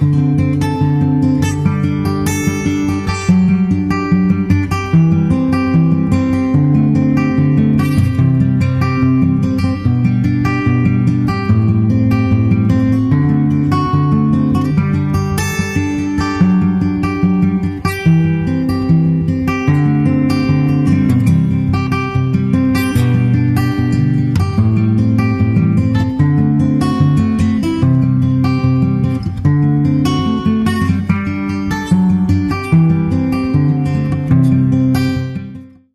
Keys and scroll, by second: 0.9 super+r, 7.2 super+r, 15.0 super+c, 16.1 super+v, 17.0 super+v, 19.6 shift+super+Right, 20.3 super+s, 21.1 super+Tab, 21.9 super+Tab, 33.9 super+Tab, 35.1 super+Tab.